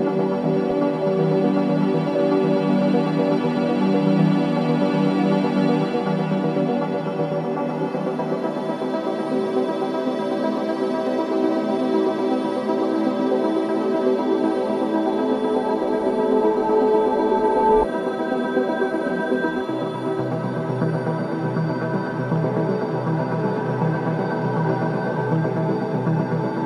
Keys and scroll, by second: 1.7 3, 3.3 ], 5.4 4, 8.9 3, 9.0 ], 10.0 ], 11.0 4, 13.0 3, 14.0 4, 14.6 3, 15.0 ], 17.4 4, 19.4 3, 20.6 4, 21.2 3, 25.3 4.